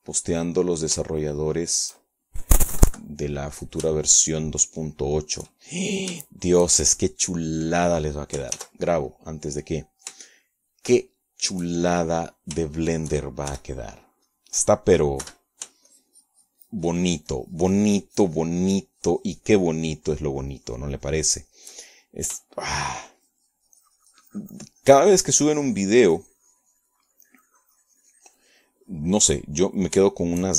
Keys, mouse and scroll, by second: 3.2 shift+click, 3.8 shift+click, 4.9 KP_Subtract, 5.4 click, 6.1 shift+click, 6.2 shift+middle click, 6.8 shift+click, 6.9 shift+middle click, 8.4 shift+click, 10.7 ctrl+s, 11.2 ctrl+click, 12.4-14.6 shift+middle drag, 14.9 shift+click, 15.7 shift+f, 16.4 middle click, 17.4 3, 18.0-23.9 shift+drag, 24.0 shift+click, 24.8-30.5 shift+drag.